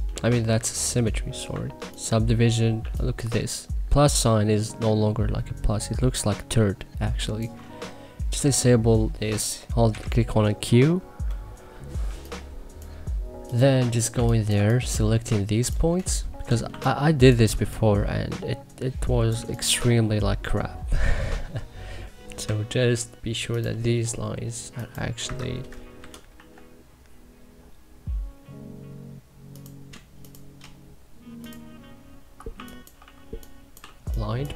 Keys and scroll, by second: 0.2 ctrl+z, 2.7 3, 9.8 q, 12.0 3, 14.0 1, 14.5 2, 16.6 2, 19.3 1, 22.4 k, 25.2 Escape, 25.9 c, 26.3 e, 32.5-34.5 typing.